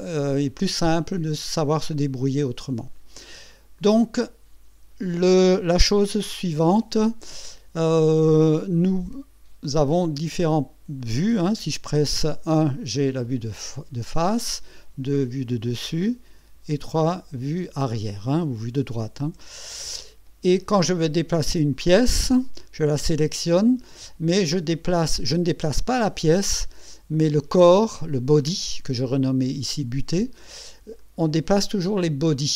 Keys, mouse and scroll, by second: 3.8-5.7 drag, 10.2 KP_1, 14.3 KP_2, 16.4 KP_3, 19.2 KP_1, 21.9 click, 31.0 click.